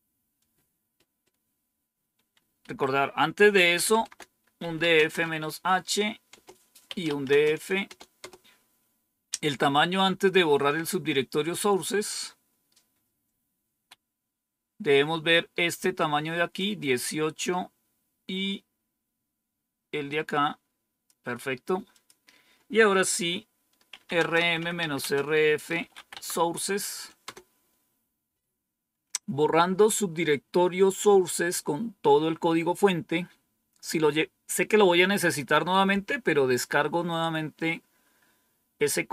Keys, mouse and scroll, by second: 2.1 Down, 2.6 Up, 3.7-6.2 typing, 6.8 Return, 15.9 click, 20.0 click, 21.9 click, 23.6-26.4 typing, 27.2 Return.